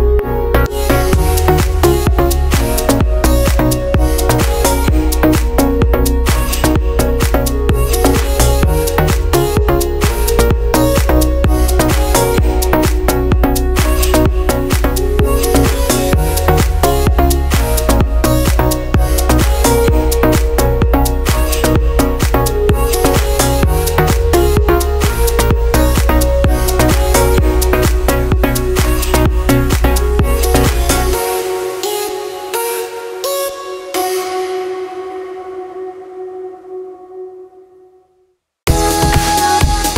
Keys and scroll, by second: 12.6 ctrl+z, 14.9 ctrl+z, 15.9 ctrl+z, 17.1 ctrl+z, 19.7 ctrl+z, 21.5 ctrl+z, 22.4 ctrl+z, 23.8 ctrl+z, 24.9 ctrl+z, 27.1 ctrl+z, 28.0 ctrl+z, 29.1 ctrl+z, 30.1 ctrl+z, 31.3 ctrl+z, 36.0 ctrl+z.